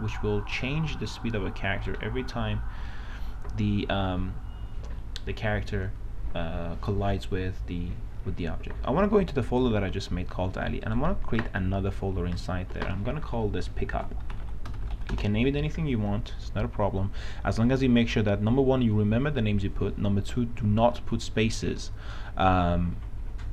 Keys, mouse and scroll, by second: 0.1 w, 0.6 a, 11.3 right click, 12.6 click, 14.1-15.6 typing.